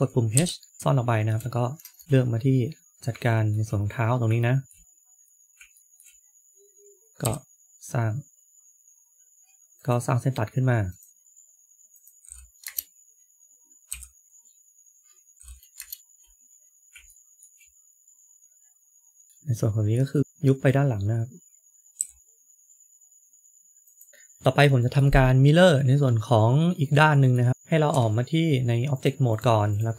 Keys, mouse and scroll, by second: 0.2 h, 0.7 shift+middle click, 0.7 scroll up 3, 2.0 shift+middle click, 2.0-2.6 scroll up 3, 2.0 KP_3, 2.0 KP_1, 2.7 scroll up 2, 3.2 shift+middle click, 4.3 shift+middle click, 5.0-5.4 scroll up 3, 5.7 shift+middle click, 7.1 k, 13.8 k, 14.2 shift+middle click, 14.2-15.1 scroll down 6, 16.6-17.1 scroll up 2, 17.0 shift+middle click, 19.2 middle click, 19.3 shift+click, 20.2 KP_3, 21.9 g, 24.1 shift+middle click, 26.2 middle click, 27.8 Tab, 29.2 click, 29.6 click.